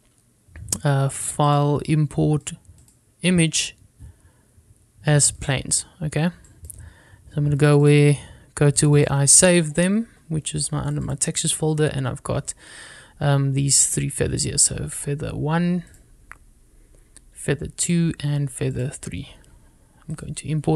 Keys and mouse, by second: 0.3 shift+a, 2.6-6.8 drag.